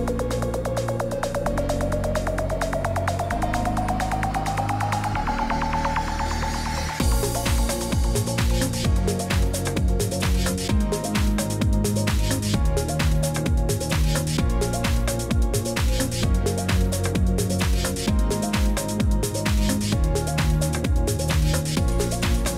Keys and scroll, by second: 0.8 BackSpace, 2.2 BackSpace, 3.6-6.2 typing, 5.0 Right, 7.5 ctrl+c, 8.7 ctrl+v.